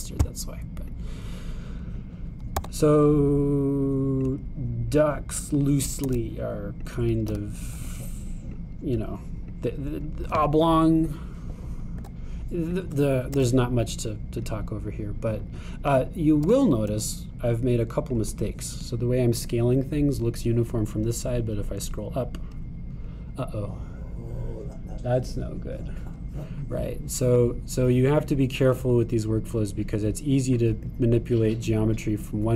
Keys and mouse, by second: 2.0-5.3 drag, 3.6 e, 6.1-8.0 drag, 7.1 s, 8.3 g, 10.6-13.9 drag, 13.0 e, 14.4 s, 17.5 g.